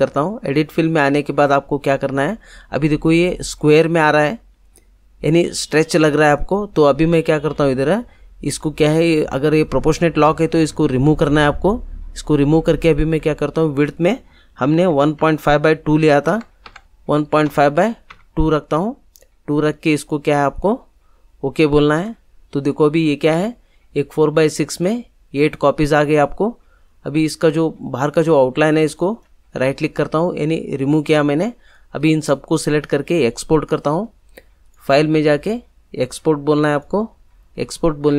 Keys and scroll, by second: 14.6 1, 14.9 ., 15.1 5, 16.2 Tab, 18.1 2.